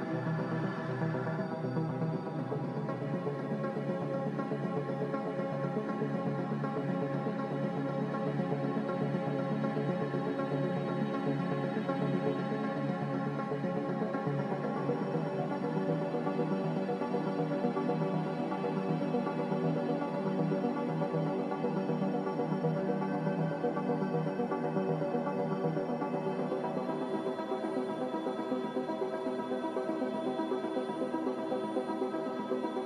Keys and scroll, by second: 24.3 z.